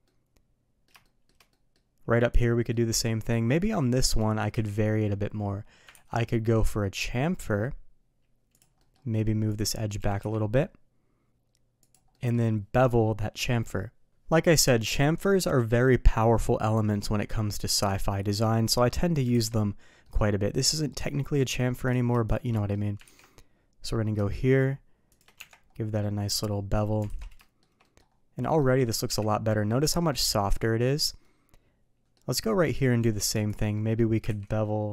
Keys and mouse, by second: 0.0-0.8 middle drag, 1.0 shift+middle drag, 1.5 middle drag, 2.7 middle drag, 3.3 middle click, 4.5 KP_3, 5.9 ctrl+b, 8.7 middle click, 9.5 click, 9.7 middle click, 10.0 g, 12.1 middle drag, 18.4 middle click, 19.3 alt+a, 20.0 middle click, 22.2 shift+click, 22.5 middle click, 23.2 ctrl+b, 26.0-26.3 middle drag, 27.0 alt+a, 27.4 shift+middle drag, 27.8 middle drag, 28.4 middle drag, 29.0 KP_3, 31.2-32.1 middle drag, 33.0 Tab, 33.7 middle drag, 34.2 ctrl+b.